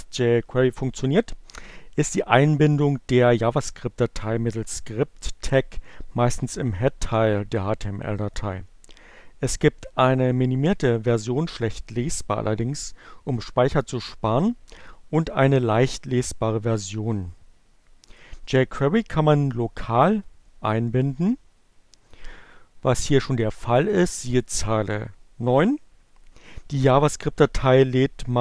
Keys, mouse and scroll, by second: 23.8 click.